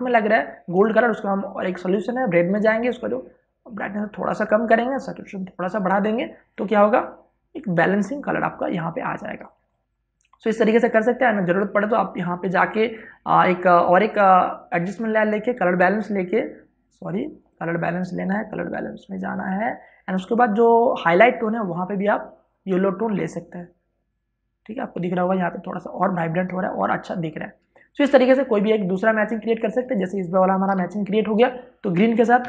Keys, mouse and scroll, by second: 10.2 space, 10.4 ctrl+click, 18.1-28.4 drag, 28.4 space, 28.6 ctrl+click, 30.5 v, 30.9 click, 31.4 w, 31.8 click.